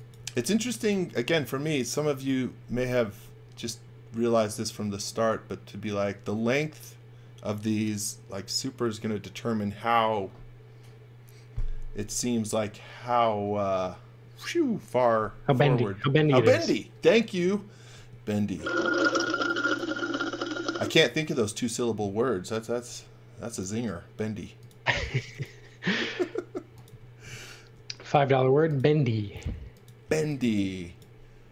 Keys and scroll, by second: 0.2 v, 17.9 space, 22.9 m, 25.1 space, 27.7 m, 29.9-30.9 typing.